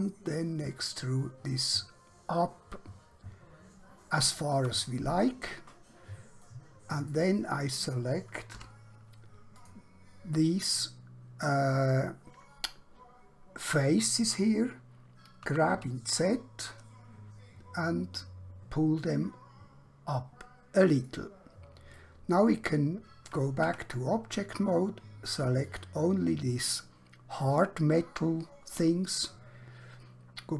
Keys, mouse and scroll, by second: 4.3 shift+click, 6.5 middle click, 8.5 3, 9.5 alt+click, 15.5 g, 15.7 z, 21.0 click, 22.1 middle click, 23.7 Tab, 25.6 click.